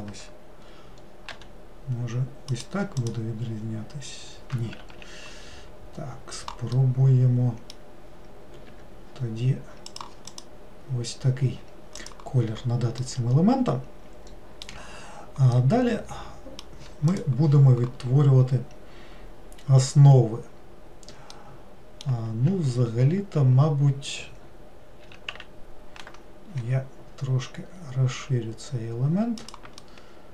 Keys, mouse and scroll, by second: 1.3 g, 3.1 click, 4.8 ctrl+z, 6.8-8.7 middle drag, 8.7 g, 10.4 click, 12.0 click, 13.0-18.7 middle drag, 21.4-22.8 middle drag, 22.8 ctrl+z, 23.4 ctrl+z, 25.1 s, 29.9-30.3 middle drag.